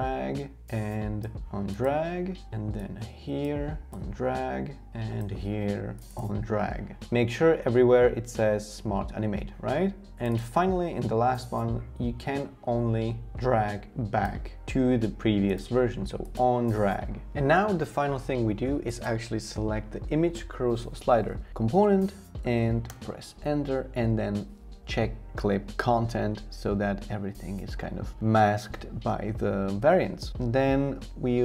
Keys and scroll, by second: 22.9 Return, 30.3 Return.